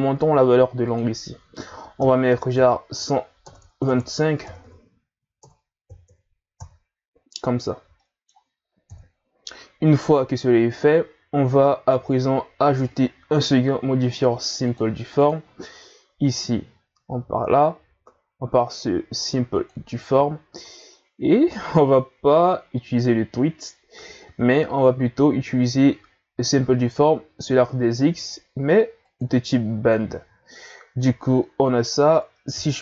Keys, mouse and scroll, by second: 0.9-3.6 drag, 3.6 BackSpace, 8.0 middle click, 8.9 KP_1, 10.5-11.8 scroll down 1, 11.8-12.9 scroll down 1, 12.9-15.3 drag, 16.2-19.3 drag, 22.5-23.2 scroll down 4, 29.1 click, 31.2-32.6 middle drag, 32.6 KP_3.